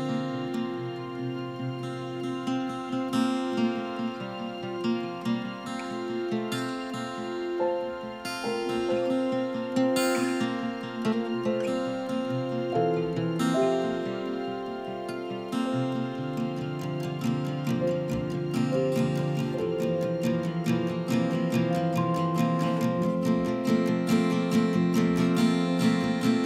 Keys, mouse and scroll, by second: 1.1-2.0 typing, 3.2 click, 3.5-13.4 typing, 5.9 right click, 6.3 click, 8.1 click, 9.8 click, 15.1-17.5 typing, 17.1 right click, 22.5 click, 23.6-26.4 typing, 25.3-26.4 drag.